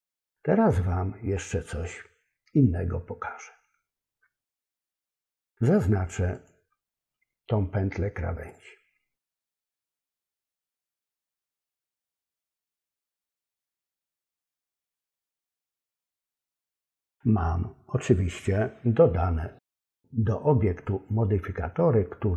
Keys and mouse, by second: 4.8 middle click, 6.3 click, 8.5 click, 9.3 click, 10.3 click, 11.2 shift+click, 12.0 shift+click, 12.7 shift+click, 13.3 shift+click, 14.0 shift+click, 15.0 shift+click.